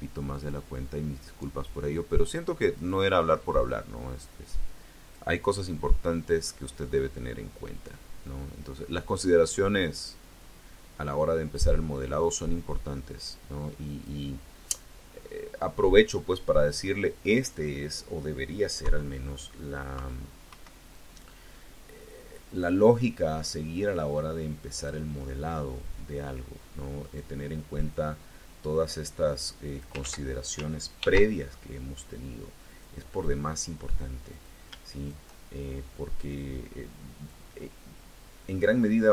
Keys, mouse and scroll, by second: 0.4-1.7 drag, 2.6 click, 3.6-5.2 drag, 6.4-11.6 drag, 12.2-14.1 drag, 14.3-14.8 scroll up 1, 15.4 scroll up 1, 15.5 scroll down 1, 18.6 KP_3, 19.8 KP_3, 20.4 KP_1, 22.4 click, 23.4-24.9 drag, 25.0-25.3 scroll up 1, 26.9 click, 27.8-29.8 drag, 29.8 ctrl+z, 30.8 ctrl+r, 32.5 click, 33.0 click, 34.2 click, 34.8 shift+click, 36.0-39.1 drag.